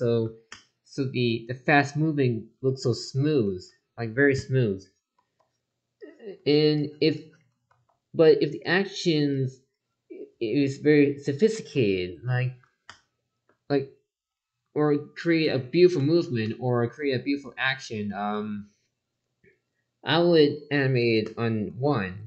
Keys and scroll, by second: 5.1 ctrl+z, 7.7 ctrl+z, 11.5 ctrl+z, 20.1 ctrl+z.